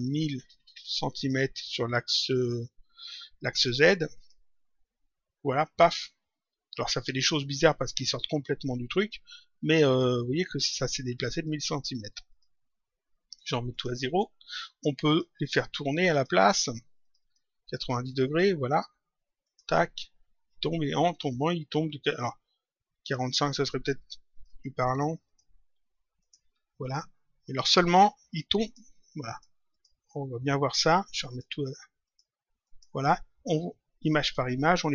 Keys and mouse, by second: 1.0 click, 4.1 click, 7.3 click, 11.1 click, 13.3 click, 15.0 click, 19.4 click, 22.0 click, 24.2 click, 28.5 click, 31.2 click.